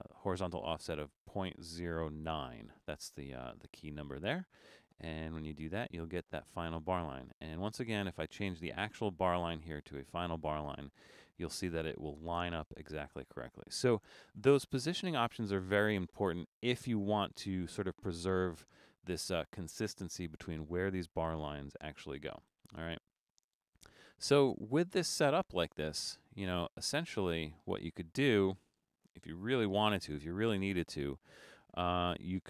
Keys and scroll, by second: 22.7 BackSpace, 24.1 Escape, 29.3 super+=, 29.7 super+-, 30.0 super+-, 30.7 super+-.